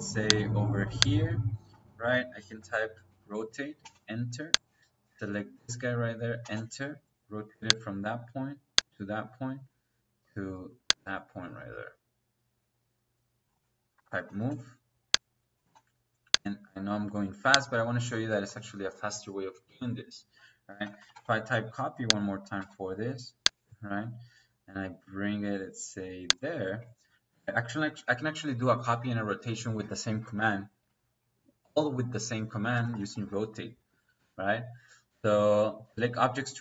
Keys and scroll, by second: 1.6 Escape, 2.3-3.7 typing, 6.3 space, 13.8 m, 14.2 o, 14.4 e, 14.4 space, 15.6 space, 17.9 Escape, 20.6-21.3 typing, 22.5 space, 26.4 Escape, 27.2 Escape, 32.6-34.1 typing.